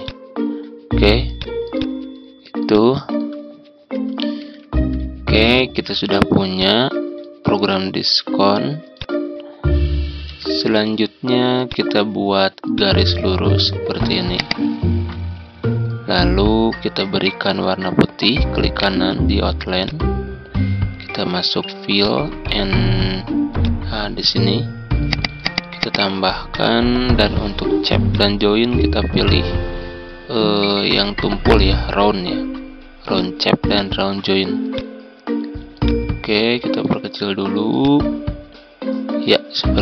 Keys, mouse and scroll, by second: 4.5 Home, 6.0 z, 6.5-7.7 drag, 10.7-12.7 drag, 14.3 ctrl+click, 18.7 right click, 19.8 click, 33.2-39.3 drag, 39.7 shift+click.